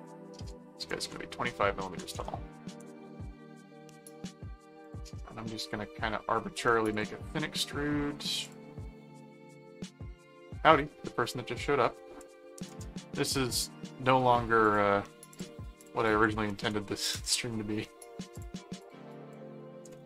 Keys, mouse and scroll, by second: 0.0 click, 4.8 click, 6.9 click, 8.4 click, 13.4 middle click, 14.6 click, 15.3 click, 18.3 click.